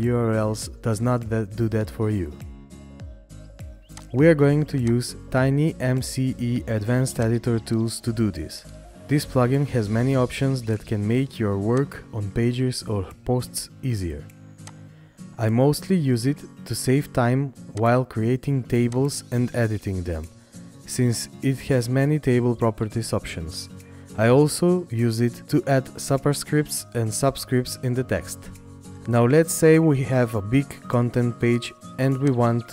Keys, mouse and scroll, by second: 3.3 right click, 6.0 right click, 22.9-28.1 scroll up 1.